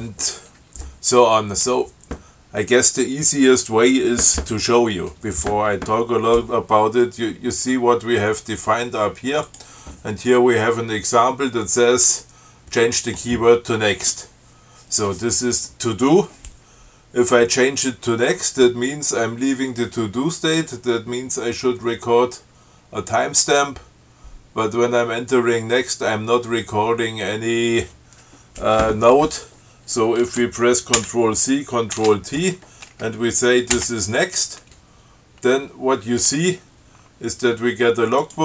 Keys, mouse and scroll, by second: 9.8 click, 31.3 ctrl+c, 32.2 ctrl+t, 34.0 n.